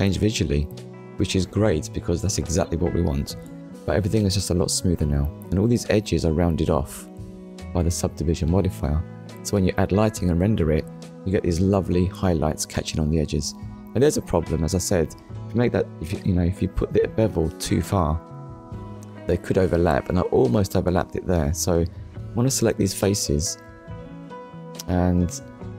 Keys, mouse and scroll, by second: 0.1 scroll up 1, 0.8 shift+middle click, 3.2 click, 3.8 middle click, 5.0-5.4 scroll down 1, 6.1 Tab, 7.0 click, 8.7 click, 9.6 click, 10.4 middle click, 12.2 scroll up 1, 13.3 middle click, 14.1 scroll up 1, 16.5 click, 17.9 shift+click, 19.7 scroll down 1, 20.4 shift+middle click, 24.4 shift+click.